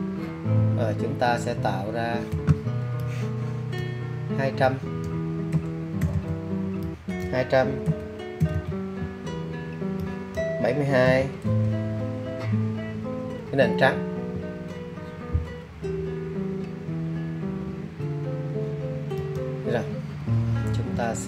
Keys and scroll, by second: 0.2-1.6 typing, 2.8 2, 3.3 0, 3.5 0, 5.7-6.9 typing.